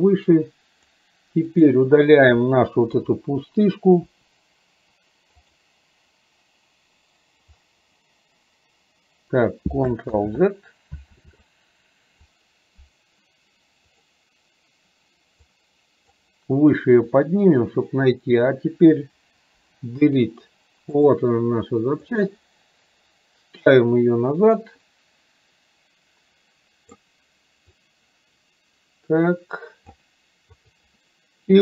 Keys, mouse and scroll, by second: 1.7 click, 5.4 click, 15.7 click, 18.5 click, 22.2-23.9 drag, 25.0-27.2 drag, 27.9-30.0 drag.